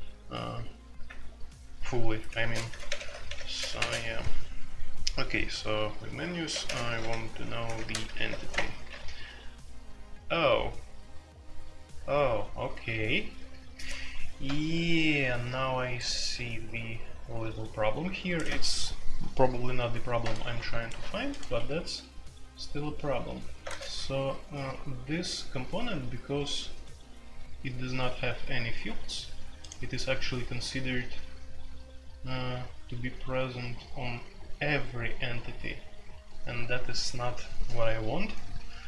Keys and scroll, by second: 1.0 Return, 2.4-3.7 typing, 6.5-8.5 typing, 21.5 Escape, 23.6 space, 23.6 Tab.